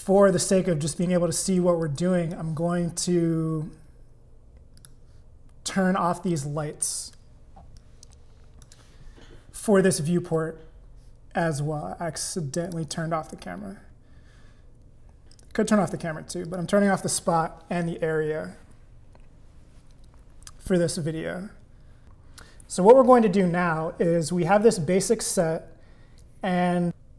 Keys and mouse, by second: 1.8 click, 4.8 click, 6.3 click, 7.8 click, 12.7 click, 16.5 click, 22.0 click.